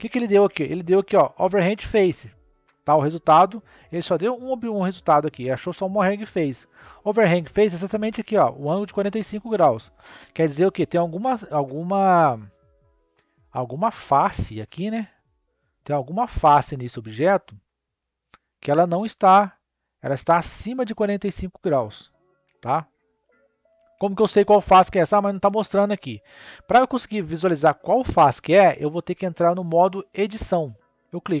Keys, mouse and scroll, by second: 13.8-15.1 middle drag, 15.1 click, 16.0 click, 17.2 click, 17.9-22.1 middle drag, 22.6-28.3 middle drag.